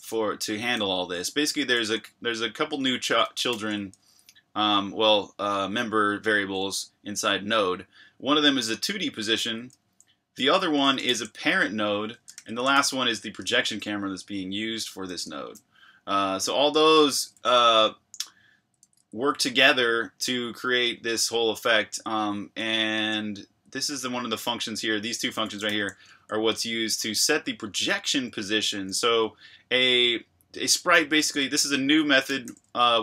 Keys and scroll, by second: 0.0-3.5 typing, 9.3 Escape, 9.5 j, 10.6 j, 11.0 shift+v, 12.3 Escape, 12.3 j, 12.7 shift+v, 14.5-15.2 typing, 16.6-26.2 typing, 27.9-28.7 typing, 31.5-32.9 typing.